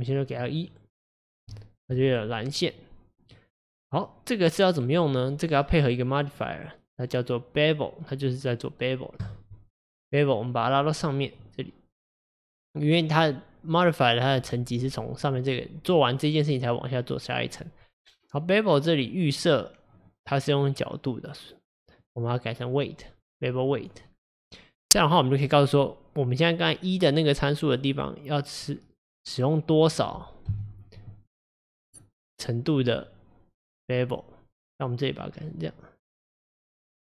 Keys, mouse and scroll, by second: 0.4-1.5 drag, 1.5-6.2 shift+middle drag, 6.2-9.3 drag, 10.5-11.4 drag, 12.1-15.9 drag, 17.5-20.5 drag, 22.0-25.0 drag, 25.2-28.2 drag, 30.5 KP_1, 31.3-34.3 middle drag, 34.6 click, 36.9 click.